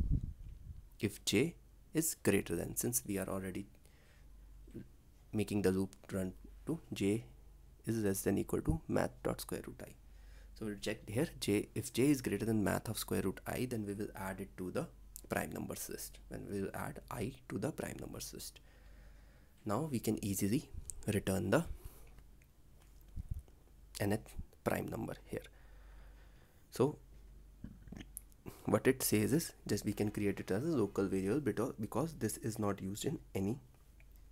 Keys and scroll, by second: 25.0 ctrl+s.